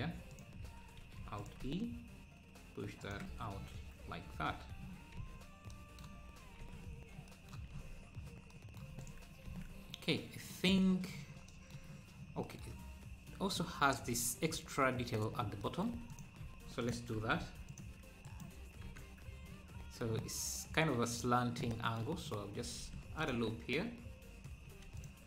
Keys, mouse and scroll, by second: 0.8 alt+e, 3.3 Tab, 3.6 scroll down 1, 4.3 scroll up 1, 4.5 Tab, 5.2 ctrl+s, 5.4 scroll down 3, 6.2 scroll up 2, 6.7 ctrl+s, 6.9-7.3 scroll down 1, 7.8 ctrl+s, 9.0 click, 9.5 ctrl+s, 9.8-10.1 scroll down 2, 10.1-11.5 middle drag, 13.3 middle click, 14.1 scroll up 1, 14.5-15.6 middle drag, 16.1 click, 16.4 Tab, 16.8 click, 17.4 ctrl+r, 18.8 KP_Decimal, 19.5 scroll down 1, 20.3-20.8 scroll down 1, 20.8 scroll up 1, 21.7 KP_Decimal, 22.1-22.9 scroll down 1, 22.9 ctrl+r, 24.4 ctrl+r, 25.0-25.2 drag.